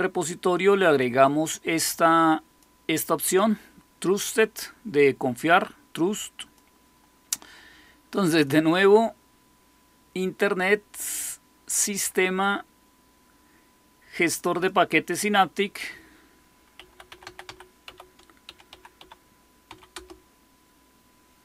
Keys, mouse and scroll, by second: 0.9-2.6 drag, 6.3 click, 8.2 click, 14.5-16.7 drag, 16.5-19.6 typing, 19.9 Return.